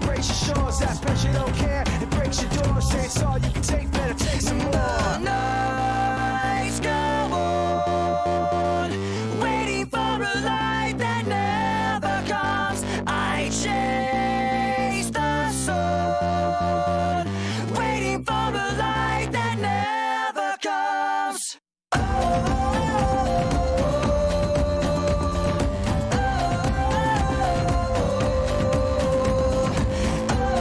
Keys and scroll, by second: 3.2-6.1 typing, 13.1-17.2 typing, 21.6-23.1 typing, 29.7 Return, 30.0-30.6 typing.